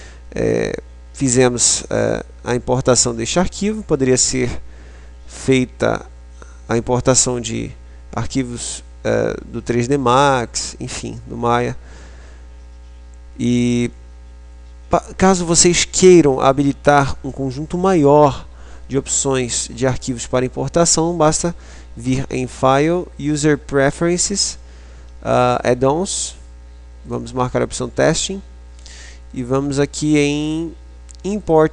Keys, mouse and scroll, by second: 21.3 click.